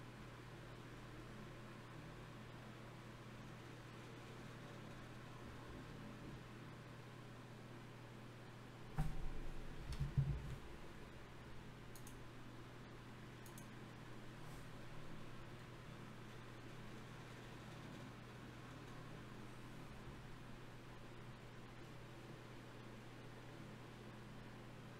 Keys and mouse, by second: 2.6-4.6 right drag, 3.6 g, 4.6 g, 6.2 click, 7.4 g, 14.6 ctrl+z, 16.0-17.9 drag, 17.9 middle click, 18.8 a, 19.0 a, 19.6 g.